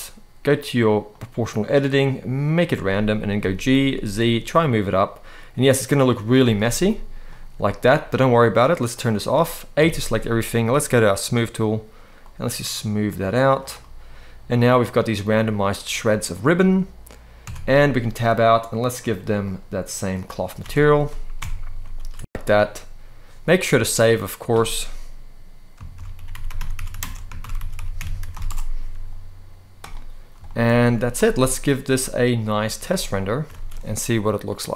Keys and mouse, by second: 0.9 click, 1.3-2.5 drag, 3.1 g, 3.5 z, 6.0 click, 6.5 middle click, 8.6 click, 9.5 a, 10.9 click, 13.5-14.7 middle drag, 17.2 Tab, 18.6 drag, 19.1-19.9 drag, 20.3 alt+a, 21.1 KP_0, 21.8 ctrl+s, 30.1 shift+middle click, 30.5 z, 32.3 z, 33.3 ctrl+s, 34.2 click.